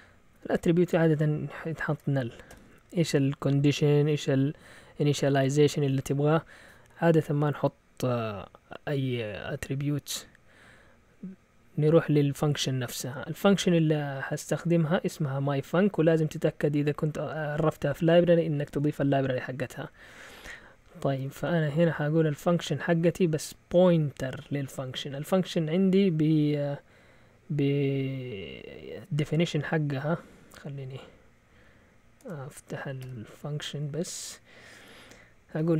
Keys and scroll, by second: 0.8-2.5 typing, 14.8 typing, 15.9-17.1 typing, 19.9 Down, 20.1 Down, 20.2 Down, 20.4 Down, 20.5 Down, 20.7 Down, 20.8 Down, 21.2 Down, 21.4 Right, 21.8 Left, 32.2 Escape, 33.0 shift+;, 35.3-35.7 typing.